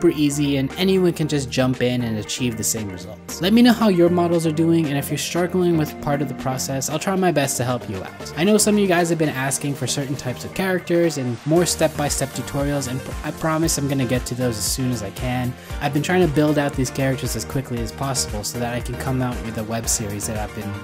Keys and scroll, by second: 7.4 ctrl+c, 7.6 ctrl+c, 8.5 ctrl+v, 13.6 alt+w.